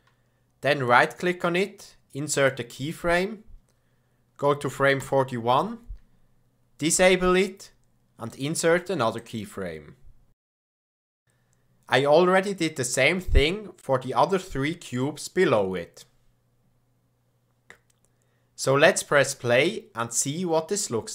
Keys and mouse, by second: 0.9 click, 5.0 Right, 8.3 click, 15.4 click, 16.3 click.